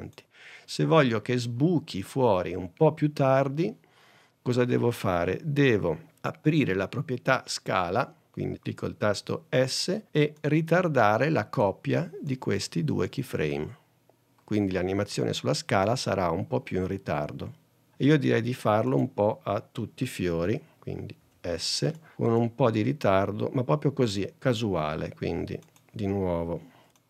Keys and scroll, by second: 9.3 s, 21.3 s, 26.4 s.